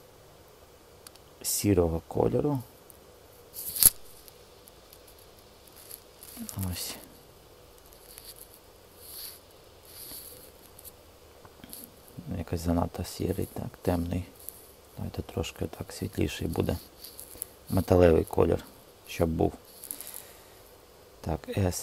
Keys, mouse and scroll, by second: 3.3 click, 14.2 g, 21.2 s, 21.7 z.